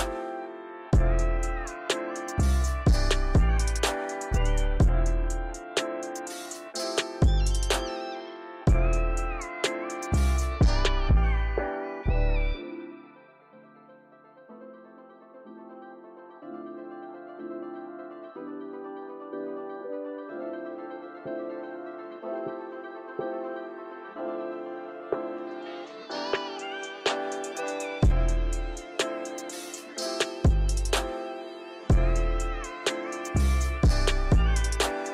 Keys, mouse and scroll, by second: 0.8 click, 1.1 click, 2.7 click, 6.9 click, 8.5 click, 9.4 click, 12.1-14.3 drag, 15.3-17.2 drag, 18.0-20.2 drag, 21.0-24.2 drag, 24.4 scroll down 2, 25.0-26.3 shift+middle drag, 26.3-26.8 scroll up 1, 26.8 click, 28.0 click, 28.8-30.7 drag, 30.7 shift+middle drag, 31.0-31.5 scroll up 3, 31.5-32.6 shift+middle drag, 32.6 click, 33.9 click.